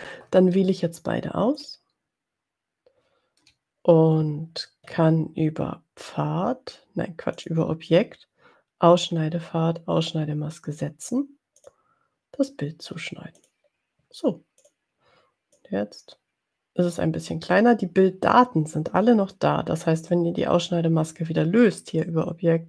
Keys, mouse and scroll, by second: 1.9 shift+click, 7.3 click, 11.6 click, 13.5 click, 14.6 click, 15.6-17.6 drag, 21.8 click.